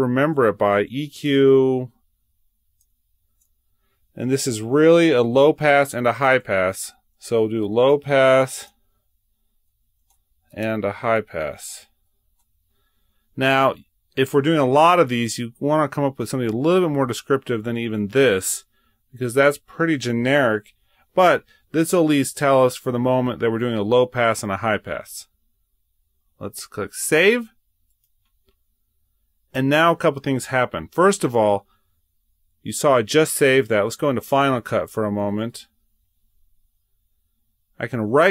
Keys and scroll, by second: 0.0-0.6 typing, 3.1-3.9 typing, 7.5-8.2 typing, 9.8-12.2 typing, 20.7 typing, 34.5 super+Tab.